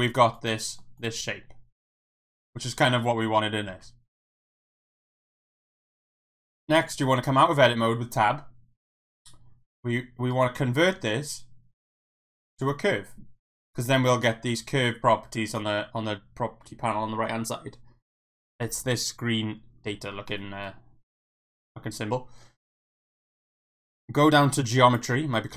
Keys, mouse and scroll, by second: 0.2 Tab, 0.4 click, 0.5 middle drag, 1.0 click, 1.9 Tab, 1.9 middle click, 3.8 alt+Tab, 5.0 shift+middle click, 5.3 middle click, 5.7 Tab, 6.9 Tab, 10.5-12.7 right drag, 24.9 click.